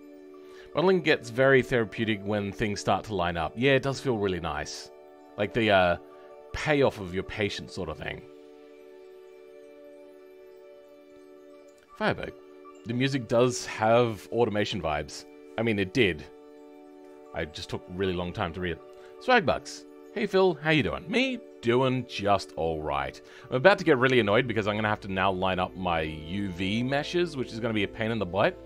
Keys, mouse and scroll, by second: 21.9 middle click.